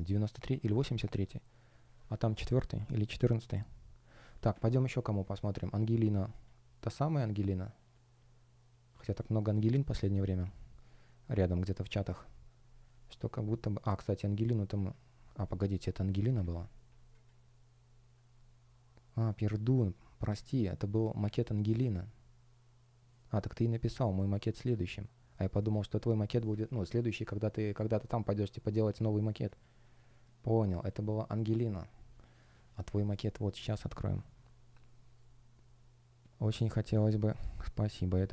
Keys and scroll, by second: 16.3 super+w, 26.6 super+w.